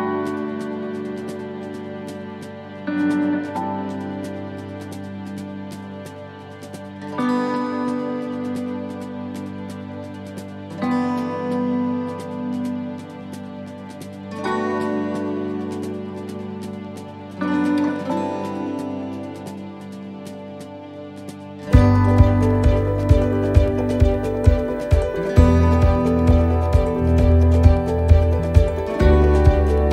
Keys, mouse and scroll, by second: 0.0 right click, 0.5 shift+right click, 2.8 shift+right click, 3.0 middle click, 4.2 click, 6.3 middle click, 8.6 right click, 9.8 shift+right click, 11.0 click, 13.3 right click, 14.3 click, 19.1 middle click, 19.7 middle click, 20.3 right click, 21.6 shift+right click, 22.8 click, 26.3 middle click, 27.4 right click, 28.3 click.